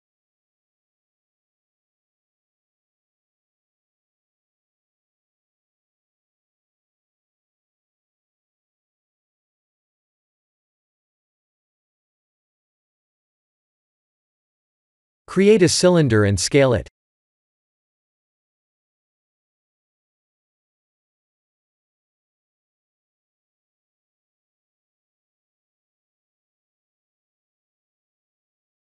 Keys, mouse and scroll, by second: 1.7 scroll down 2, 2.9 middle click, 2.9-3.3 scroll down 1, 3.3 middle click, 6.2 e, 11.1 middle click, 13.6-14.1 scroll down 3, 13.9 shift+middle click, 14.5 middle click, 15.4 click, 16.1 Tab, 16.5 shift+a, 19.3 s, 20.9 s, 23.0 click, 24.0 click, 25.7 middle click.